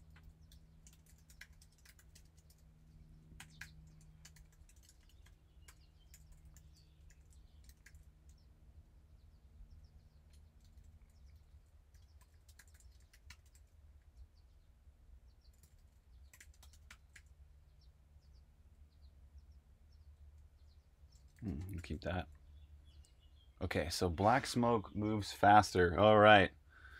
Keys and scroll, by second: 0.0-5.6 typing, 6.9-8.3 typing, 10.4-22.6 typing.